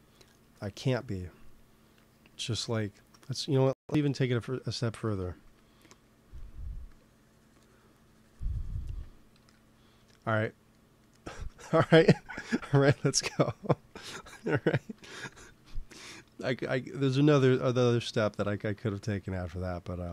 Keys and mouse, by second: 0.1-1.3 drag, 3.5 i, 5.3 f, 6.2 f, 6.8-8.8 drag, 9.3 KP_1, 10.3 middle click, 12.7 ctrl+z, 18.5 ctrl+s.